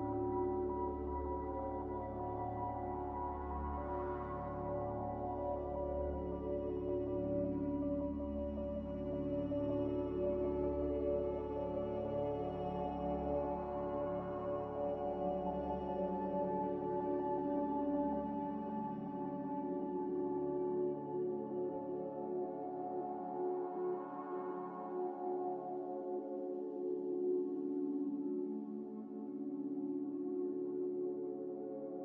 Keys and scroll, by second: 5.9 F9, 14.8 r, 20.9 ctrl+c, 21.1 ctrl+v, 24.1 z, 27.5 a.